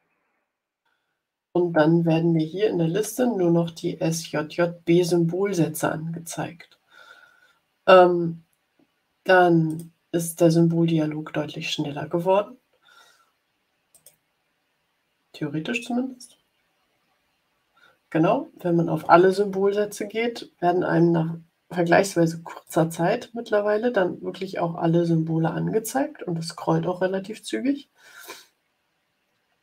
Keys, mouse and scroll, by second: 2.6-3.1 scroll down 2, 3.4-4.3 scroll down 2, 6.1 scroll up 1, 6.7-7.0 scroll up 1, 9.6 click, 13.8 click, 22.7-29.6 drag.